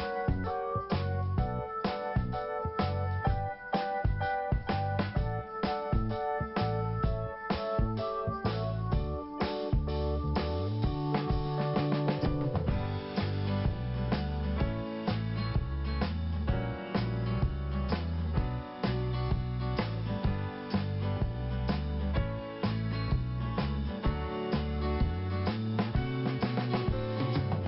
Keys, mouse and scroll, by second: 0.1 click, 1.1 click, 1.5 scroll down 1, 3.0 click, 4.1 scroll down 1, 5.0 click, 5.3 click, 5.8 click, 9.3 scroll down 1, 11.1 scroll up 1, 13.2 click, 13.3 click, 13.8 click, 13.9 click, 14.7 click, 14.7 click, 15.9 scroll up 1, 17.9 click, 18.0 click, 22.9 click, 23.0 click.